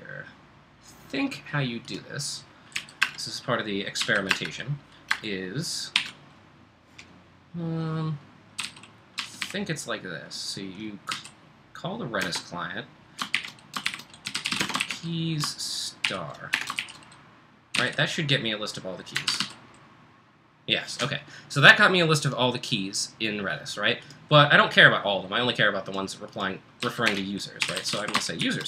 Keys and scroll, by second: 2.8 o, 3.0 Return, 4.0 a, 4.3 Return, 6.2 @, 7.5-11.1 typing, 12.2 space, 13.3-19.9 typing, 26.8-28.6 typing.